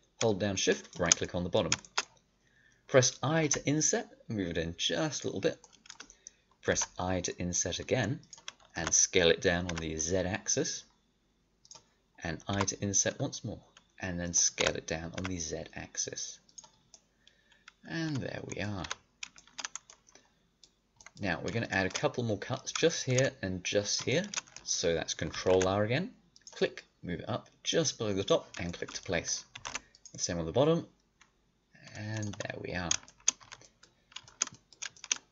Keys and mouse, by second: 3.4 i, 6.7 i, 8.7 s, 12.4 i, 14.5 s, 16.7-17.8 middle drag, 18.4 middle click, 18.8 a, 19.0 middle click, 25.3 ctrl+r, 28.7 click, 29.5 ctrl+r, 32.3-33.4 drag, 33.4 a, 35.1-35.3 middle drag.